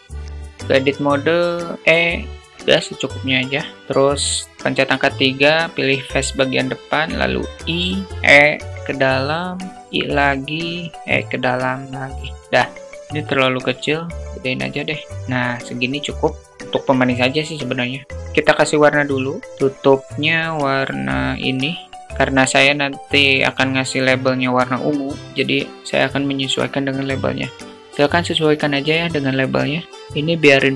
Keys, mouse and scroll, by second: 0.0 alt+middle click, 0.1 Tab, 1.8 e, 2.4 middle click, 3.7 3, 6.6 i, 8.1 e, 9.7 i, 10.9 e, 12.3 Tab, 13.2 s, 15.3 click, 29.5 click, 29.9 click.